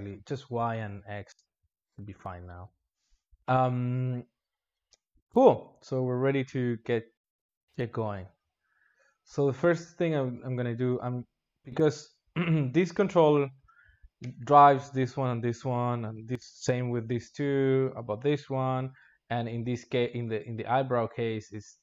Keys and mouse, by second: 1.8 click, 7.0-7.4 drag, 7.4 space, 9.8 space, 10.1-11.2 drag, 13.5 g.